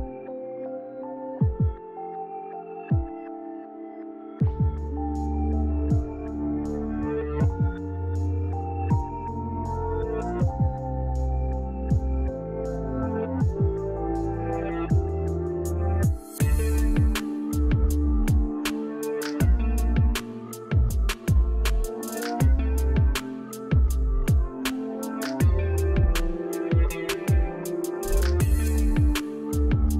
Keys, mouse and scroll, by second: 1.7 click, 14.7 click, 19.5-20.4 drag, 25.7 click, 29.7 click.